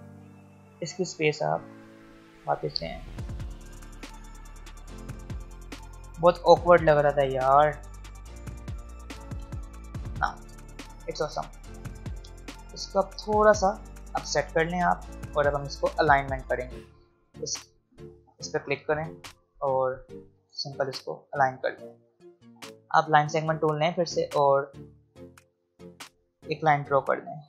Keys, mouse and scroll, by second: 8.0 click, 10.6-11.5 alt+scroll down 1, 12.3-15.1 drag, 15.1 ctrl+g, 16.0 shift+click, 18.0 click, 20.4 click, 22.2 alt+scroll up 1, 22.4 click, 26.5-27.4 drag.